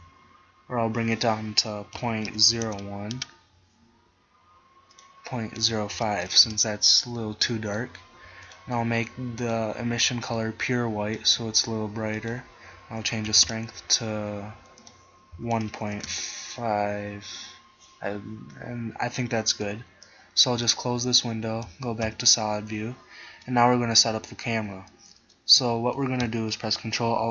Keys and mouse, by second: 1.2-3.2 drag, 5.0-6.8 drag, 7.8 click, 8.6-10.5 right drag, 10.5 click, 11.3 middle click, 14.1 middle click, 18.7 click, 21.8 z, 22.1 z.